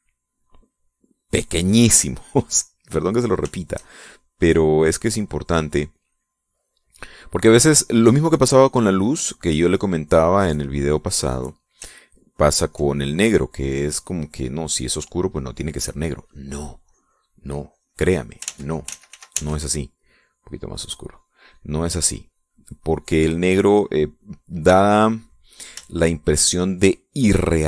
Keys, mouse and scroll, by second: 0.0 middle click, 4.0 shift+click, 4.3-10.7 shift+drag, 10.7-12.0 drag, 12.5 ctrl+click, 14.5-16.6 drag, 17.3-18.8 drag, 18.9 ctrl+z, 20.7 click, 22.0 click, 23.0-24.7 drag, 26.3-27.6 shift+drag.